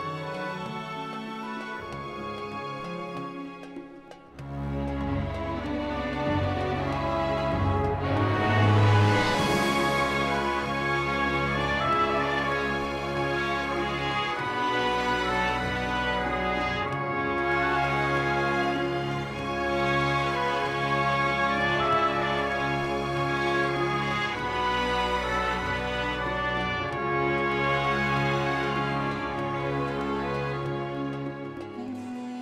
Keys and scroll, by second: 0.5 g, 0.6 z, 4.6 ctrl+z, 6.5 g, 6.7 x, 10.7 g, 11.3 alt+a, 13.3 Tab, 14.4 shift+s, 15.0 Tab, 15.3 shift+a, 16.7 Tab, 17.0 s, 22.9 r, 23.5 Return, 27.5 s, 31.7 g, 32.1 x.